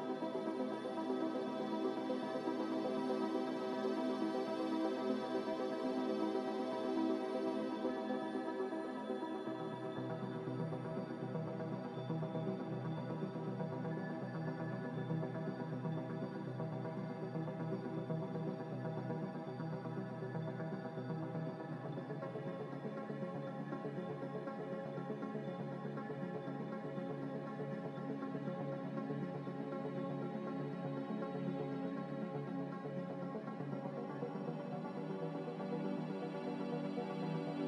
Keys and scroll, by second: 13.5 ctrl+z, 13.6 ctrl+z, 18.7 a, 21.0-21.8 typing, 23.0-23.7 typing, 29.7 Caps_Lock, 30.1-31.7 typing.